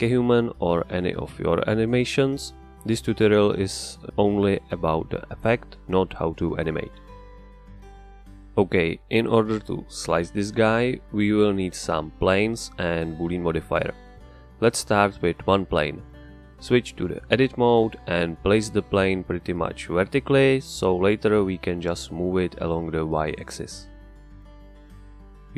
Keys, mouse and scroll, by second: 9.9 Escape, 11.1-12.0 scroll down 1, 12.0-14.2 middle drag, 14.2 shift+a, 17.1 Tab, 19.2 r, 24.4 Return.